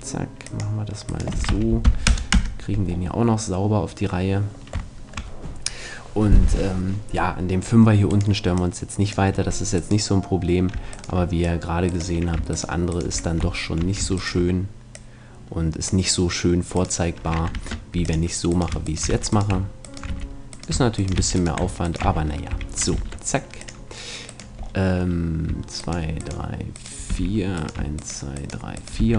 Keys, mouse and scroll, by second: 1.2-2.9 right drag, 1.3 s, 4.9-6.9 middle drag, 8.1-9.1 right drag, 8.5 click, 13.3-14.9 middle drag, 17.5 ctrl+Tab, 19.1 f, 20.1 f, 21.2 f, 22.1 f, 22.5 a, 23.0 ctrl+Tab, 27.1 f, 29.0 f.